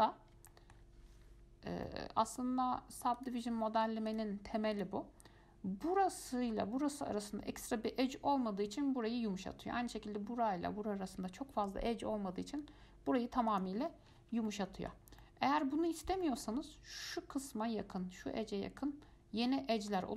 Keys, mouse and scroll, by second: 0.4 scroll up 1, 0.7-1.6 shift+middle drag, 1.6-2.1 scroll down 1, 2.1-3.4 middle drag, 3.4-5.0 drag, 5.4 scroll up 1, 13.7 click, 14.3-14.6 scroll down 2, 14.6 scroll up 1, 14.7 middle click, 15.2 scroll down 1, 15.4 scroll up 1, 15.4 middle click, 16.1-16.4 scroll up 1, 16.4-19.4 shift+middle drag.